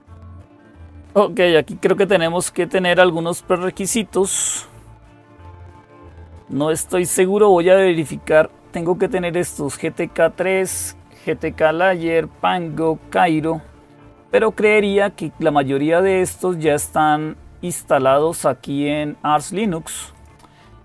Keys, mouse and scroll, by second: 14.2-17.2 drag, 17.5-20.5 drag.